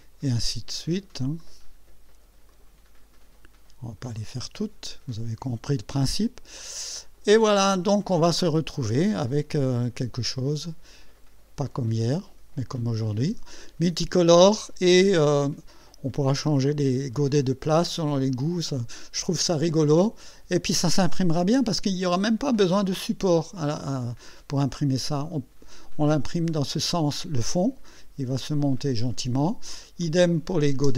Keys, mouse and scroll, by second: 1.4 click, 2.5 click, 4.2 click, 5.4 click, 6.0 click, 6.6 click, 7.7 click, 10.1 click, 11.7 click, 18.7-23.7 drag, 24.0-26.2 drag, 26.5 click, 30.0 click, 30.8 space.